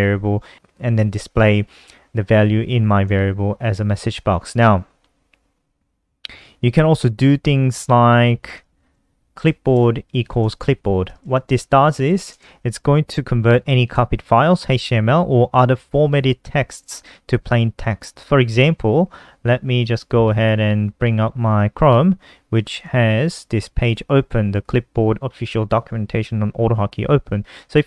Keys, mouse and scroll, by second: 0.6 click, 3.9 click, 8.0 click, 8.6 Up, 8.7 Up, 8.9 shift+End, 9.1 BackSpace, 9.4 Up, 20.8 click, 22.0 click, 22.7-24.9 scroll up 2, 27.2 click.